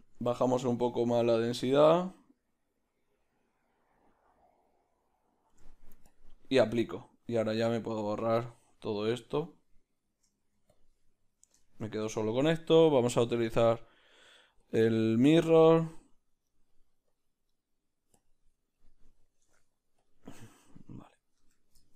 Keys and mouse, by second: 0.2-7.9 shift+drag, 7.9-10.8 right drag, 10.8 x, 11.3 right click, 11.7-14.8 shift+middle drag, 14.8-18.7 drag, 18.7-21.9 middle drag, 20.1 Tab, 20.1 b, 21.5 Tab.